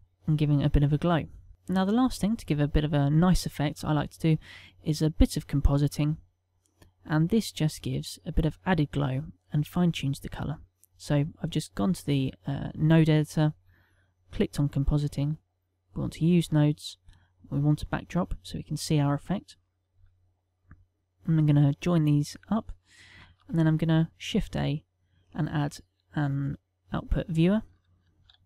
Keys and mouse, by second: 6.0 click.